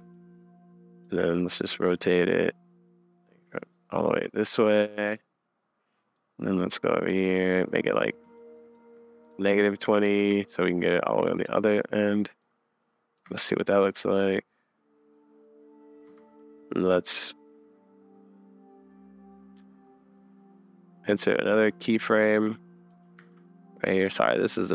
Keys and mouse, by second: 0.1-2.0 drag, 2.3-4.0 shift+drag, 4.5 click, 6.2 click, 6.9 middle click, 8.5 shift+middle click, 9.2-10.2 middle drag, 11.1 click, 12.4 middle drag, 12.5-13.2 drag, 13.4 space, 15.9 middle click, 16.1 space, 16.4 middle click, 19.5-22.6 middle drag, 22.6 click, 23.2 super+s, 24.1 click.